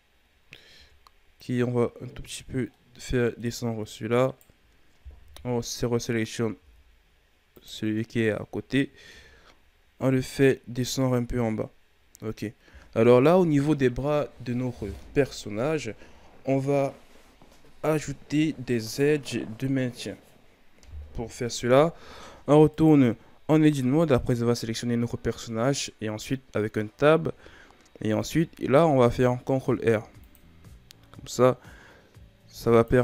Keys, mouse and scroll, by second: 0.7 Tab, 1.4-2.7 drag, 2.7 middle click, 3.5-4.2 scroll up 3, 4.2 right click, 5.1 KP_1, 6.5 g, 7.8-8.5 scroll down 3, 8.5-9.0 ctrl+scroll down 1, 9.0 Tab, 9.5-10.4 scroll down 1, 10.4-11.8 scroll up 3, 11.8-15.0 shift+scroll down 5, 22.7 right click, 23.6 Tab, 24.2-27.3 ctrl+scroll up 2, 27.8-28.3 shift+scroll down 2, 28.3-29.7 ctrl+scroll up 6, 29.7 ctrl+r.